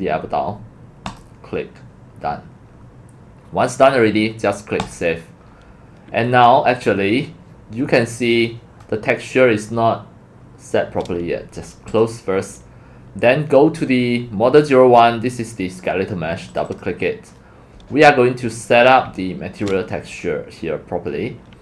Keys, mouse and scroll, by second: 0.0 click, 2.2-2.8 scroll down 4, 2.9 middle click, 3.0 click, 4.8 click, 5.6 middle click, 5.7 middle click, 6.7-7.3 scroll, 9.2 scroll, 12.0 click, 16.8 click, 18.1 scroll, 18.2 scroll down 2, 18.3 scroll, 18.6 middle click, 20.2 scroll.